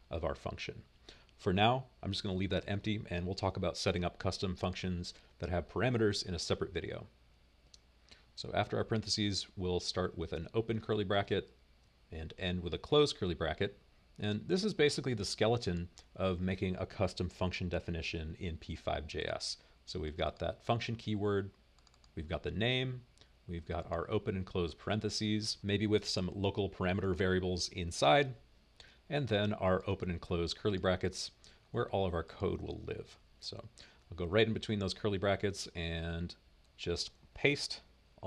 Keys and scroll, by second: 10.3 {, 11.2 Return, 11.4 Return, 12.8 typing, 14.6 typing.